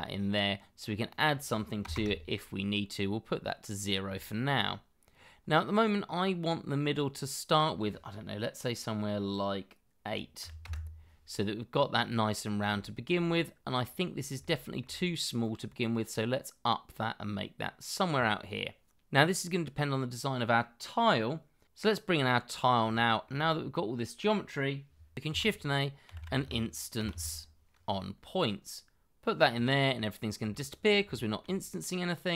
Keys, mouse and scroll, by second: 1.8 0, 1.9 Return, 3.1-4.0 scroll up 1, 4.1 shift+middle click, 6.8-8.8 scroll up 1, 10.4 8, 10.6 Return, 11.7-12.4 scroll up 1, 12.4 scroll down 1, 12.8 shift+middle click, 14.1 scroll down 1, 15.4 shift+middle click, 21.7 scroll down 1, 22.3 shift+middle click, 24.9 shift+middle click, 25.2-27.1 typing, 30.5 shift+middle click.